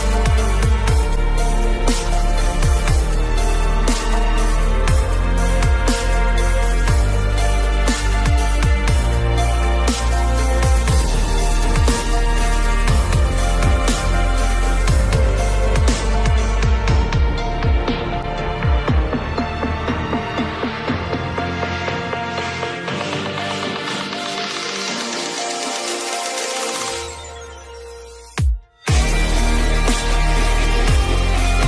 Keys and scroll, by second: 6.0 ctrl+0.